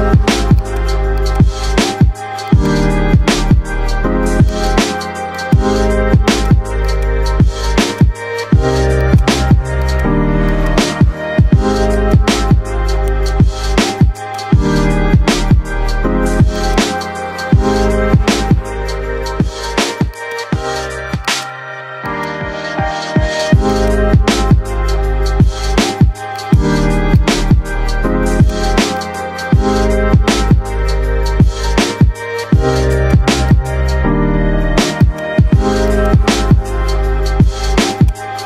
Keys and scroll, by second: 1.8 ctrl+r, 6.5 c, 10.7 c, 19.0 shift+Page_Up, 20.4 shift+F2, 20.8 Escape, 30.1-31.6 typing, 31.4 Caps_Lock.